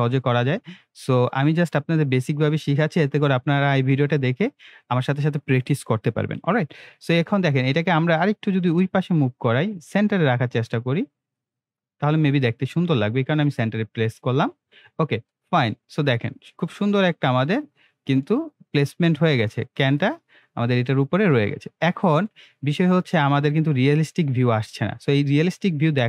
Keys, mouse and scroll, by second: 0.7-1.0 scroll up 2, 1.0 scroll down 2, 8.6-11.4 drag, 14.2 scroll up 1, 14.5 scroll down 1, 15.3-18.4 middle drag, 18.6 scroll down 1, 19.0 scroll up 1, 20.0-22.4 middle drag, 21.6 middle click, 21.8 middle click, 22.5 scroll up 1, 22.8 scroll down 1.